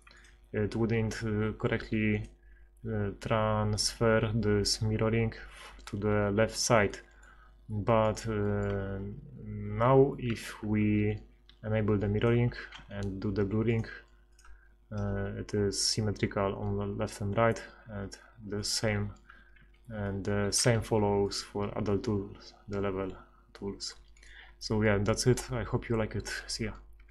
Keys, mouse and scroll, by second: 10.3 ctrl+x, 12.7 ctrl+x, 19.6 ctrl+z, 20.6 ctrl+x, 25.0-27.1 drag.